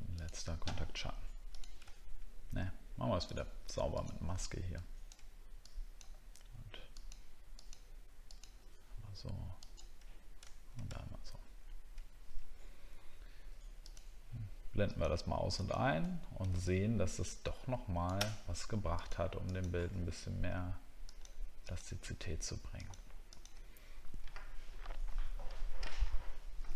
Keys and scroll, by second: 11.0 alt+scroll down 1, 16.1 alt+scroll down 1.